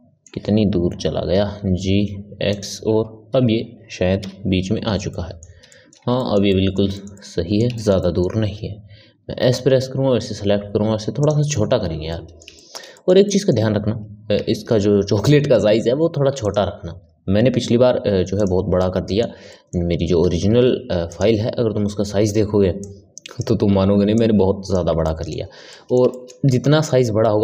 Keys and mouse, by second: 1.3 g, 3.2 KP_3, 4.1 KP_Decimal, 5.1-9.1 ctrl+middle drag, 9.1 s, 12.1-14.4 middle drag, 14.4 shift+a, 18.0 x, 18.8-21.1 middle drag, 22.8-25.0 drag, 25.0-27.4 ctrl+middle drag.